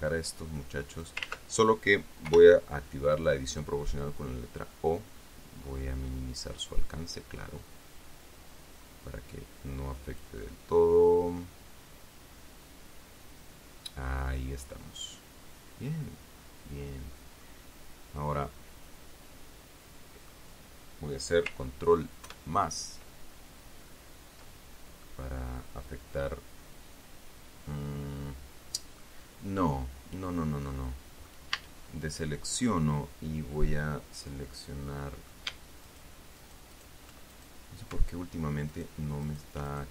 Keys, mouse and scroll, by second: 0.4-1.6 drag, 1.6 ctrl+z, 2.6 o, 3.9-5.0 drag, 5.0-5.4 scroll up 2, 5.6-8.0 scroll up 10, 10.8-17.9 middle drag, 18.0-20.8 drag, 22.6 ctrl+KP_Add, 25.4-29.5 middle drag, 30.4 scroll down 2, 31.0 middle click, 31.9 a, 32.6 scroll up 2, 32.9-35.8 middle drag, 36.2 alt+shift+right click, 36.7 alt+shift+right click, 37.7 alt+shift+right click, 39.0 alt+shift+right click, 39.6 alt+shift+right click.